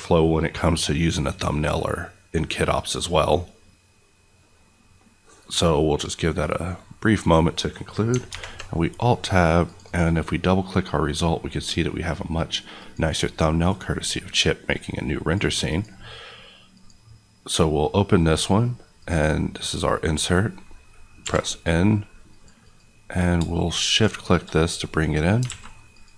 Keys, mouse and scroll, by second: 8.3 Tab, 9.6 click, 10.2 click, 12.7 click, 21.2 n, 22.2 click, 22.6 click, 25.5 a, 25.9 click.